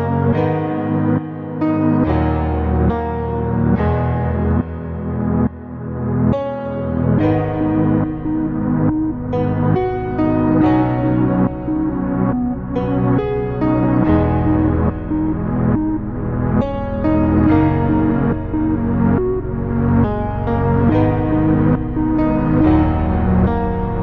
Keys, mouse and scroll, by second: 0.9 click, 2.2 click, 2.8 click, 3.3-5.2 middle drag, 5.8 KP_1, 6.2 scroll up 2, 8.4 click, 8.4 scroll up 1, 9.3-12.5 drag, 13.2-13.5 scroll down 2, 13.7-16.4 middle drag, 19.1-20.6 drag, 20.7 click, 22.4 click.